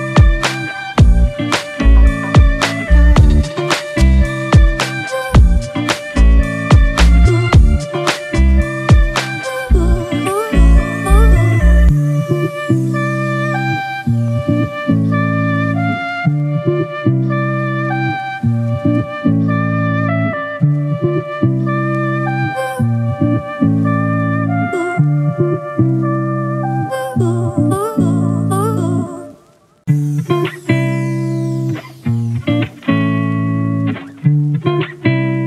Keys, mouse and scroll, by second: 1.8 typing, 14.5 double click, 28.5 ctrl+t, 29.5 alt+shift+click, 32.3 Return, 33.6 Down, 35.1 Down.